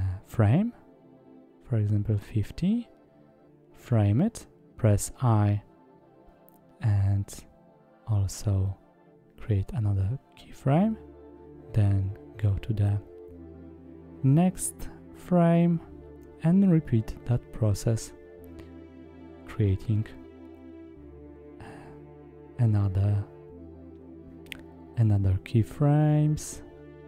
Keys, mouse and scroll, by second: 1.3 middle click, 2.9 i, 5.7 middle click, 11.4 click, 12.0-12.4 middle drag, 19.6 click, 20.5-21.5 middle drag, 25.2 i, 25.9 i.